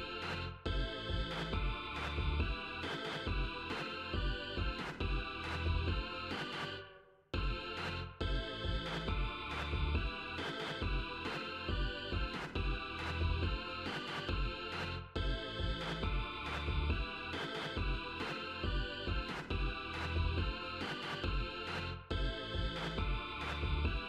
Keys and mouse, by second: 2.3-5.1 drag, 6.1 click, 7.1 0, 8.9-11.7 drag, 12.7 click, 13.6 click, 14.2 click, 15.3 0, 17.4 click, 18.9-21.8 drag, 23.4 click.